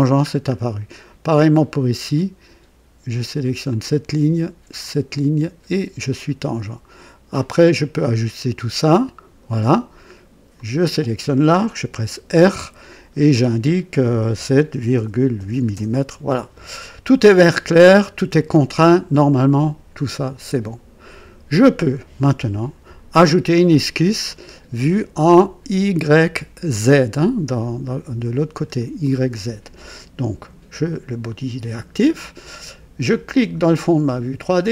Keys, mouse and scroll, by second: 0.2-0.5 scroll down 1, 3.6 click, 4.8 click, 6.0 right click, 7.3-9.4 drag, 10.5 click, 12.2 r, 14.3 KP_7, 14.9 ., 15.3 KP_8, 15.7 Return, 17.3 right click, 20.0 click, 27.4-28.8 drag, 33.3 click.